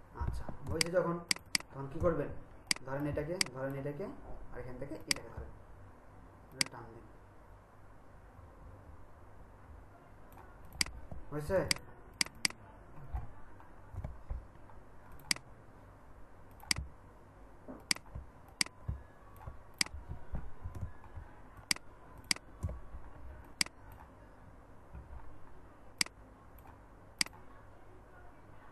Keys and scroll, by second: 0.6 ctrl+space, 11.6 ctrl+alt+space, 20.8 ctrl+alt+space.